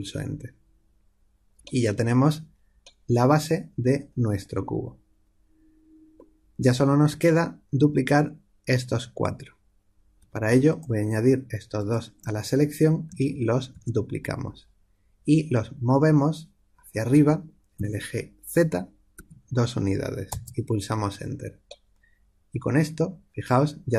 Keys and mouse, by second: 2.1-13.7 drag, 13.7 shift+d, 22.0-23.9 middle drag.